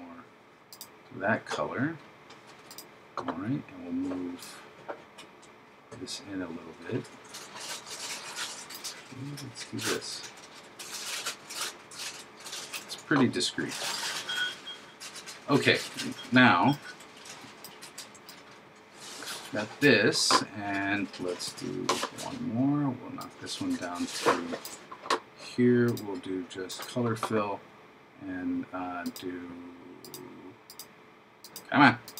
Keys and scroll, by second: 21.5 super+d.